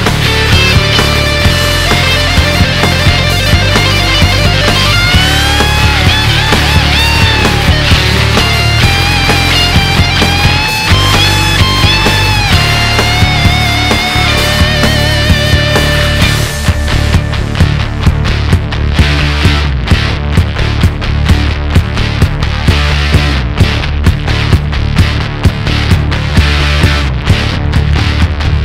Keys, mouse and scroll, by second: 5.6-9.5 drag, 9.7-12.8 drag, 14.4 click, 18.0-19.2 scroll down 2, 19.2-22.3 drag, 24.3-25.9 drag, 25.9 scroll down 3, 26.2 KP_1.